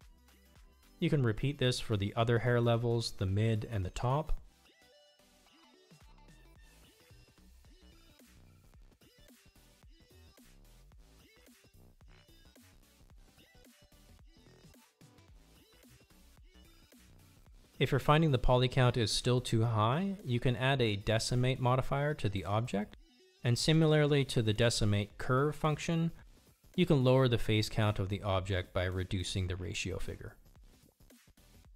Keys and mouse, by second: 2.8 click, 4.9 F3, 13.3 F3, 20.9 click, 24.4-29.5 drag.